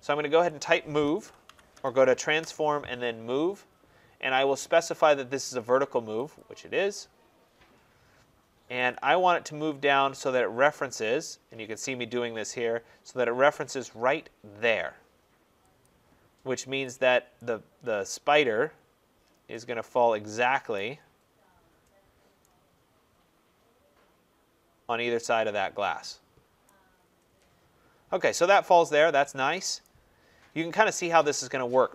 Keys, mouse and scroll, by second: 0.7-2.3 typing, 6.3 click, 8.3 click, 8.8 click, 15.7 click, 16.7 click, 16.8 click, 20.6 right click, 21.1 middle click, 21.1 middle click, 21.2 middle click, 23.5 scroll, 26.0 scroll, 26.5 right click, 26.8-27.3 middle click, 26.8 middle click, 27.1 middle click, 27.2 middle click, 29.4 scroll, 29.7 right click, 30.3-30.8 scroll, 30.8 middle click, 30.9 middle click, 31.2 middle click, 31.3 middle click.